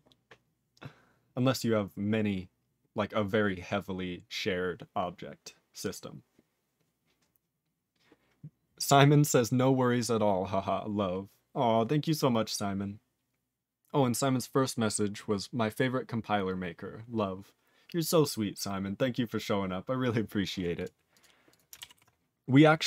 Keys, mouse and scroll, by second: 20.7 click, 20.8 click, 21.1 click, 21.2 click, 21.5 click, 21.5 click, 22.0 ctrl+s, 22.2-22.8 scroll down 3.